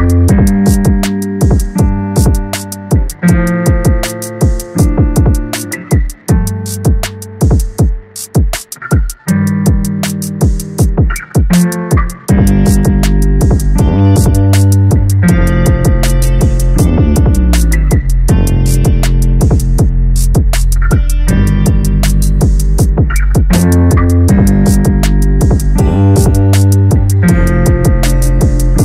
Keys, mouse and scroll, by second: 1.0 a, 1.1 a, 1.2-1.7 scroll down 1, 1.7 KP_0, 3.7 click, 5.2 click, 6.1 click, 7.2 click, 8.0 click, 9.5-11.7 drag, 11.7 BackSpace, 15.6 a, 15.8 a, 16.1-17.0 scroll up 2, 17.0 click, 18.5-19.0 drag, 19.0-20.6 scroll up 10, 20.6-21.7 middle drag, 21.7 click.